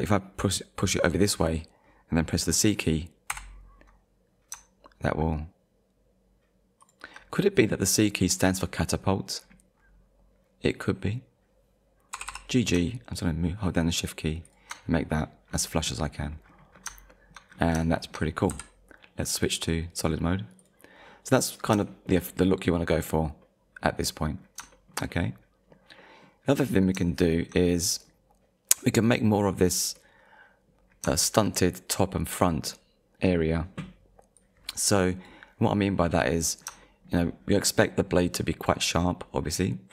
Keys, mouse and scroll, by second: 3.3 c, 6.8 shift+click, 7.5 scroll up 1, 8.4 scroll up 1, 9.3-10.1 scroll up 2, 10.3-10.7 scroll up 1, 12.1 g, 14.5 shift+click, 15.5-16.9 scroll down 4, 17.1 shift+middle click, 17.5-17.9 scroll down 2, 18.0 shift+middle click, 18.5 z, 19.4 click, 20.1-20.5 scroll down 1, 20.6 click, 21.1 middle click, 21.6 scroll down 2, 22.0 shift+middle click, 23.4 middle click, 24.4-24.7 scroll down 2, 24.7 shift+middle click, 25.6 middle click, 26.6 scroll up 1, 27.2 shift+middle click, 27.7 middle click, 29.6 click, 30.0 middle click, 30.9-31.2 scroll down 2, 31.2 shift+middle click, 34.4 click, 36.2 middle click, 36.8 shift+middle click, 38.2 middle click, 39.0 middle click.